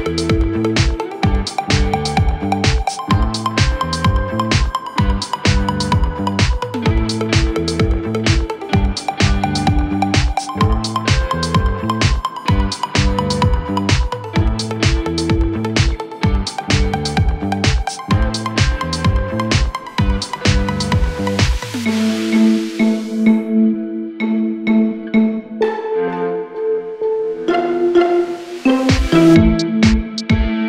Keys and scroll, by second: 0.9 ctrl+z, 3.3 4, 5.4 3, 6.5 4, 7.6 ctrl+z, 8.9 Delete, 9.8 4, 11.1 3, 12.5 4, 20.0 2, 23.1 Escape.